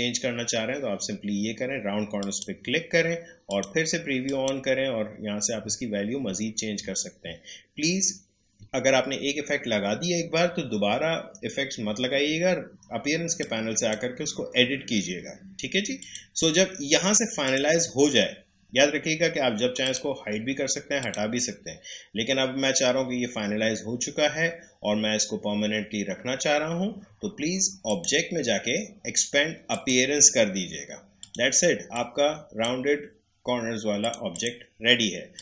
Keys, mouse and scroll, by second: 4.9-5.8 scroll up 1, 13.3-16.0 drag, 16.5-17.4 scroll down 1, 17.4 click, 19.8 click, 27.8 click.